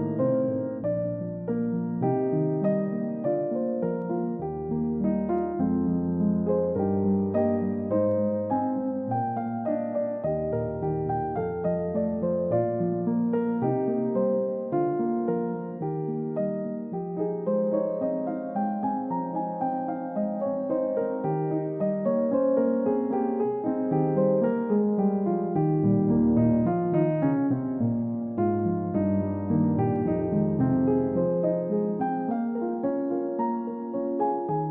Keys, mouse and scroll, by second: 8.5 ctrl+z, 9.1-9.6 scroll down 1, 9.8-10.8 scroll up 1, 10.8 scroll down 1, 11.0 middle click, 11.3-11.7 scroll up 1, 12.9 shift+click, 17.2-17.6 scroll down 1, 20.0 middle click, 26.9 shift+click.